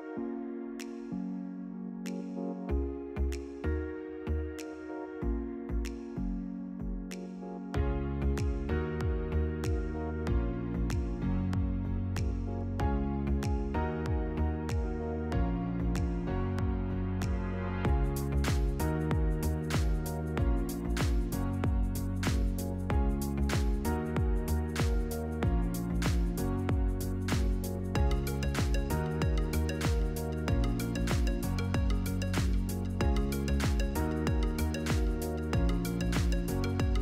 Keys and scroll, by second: 3.5 ctrl+g, 7.9 Delete, 11.7 Delete, 13.4-14.7 typing, 18.7 ctrl++, 19.1 space, 20.5 ctrl+v, 26.8 1, 27.9 Return.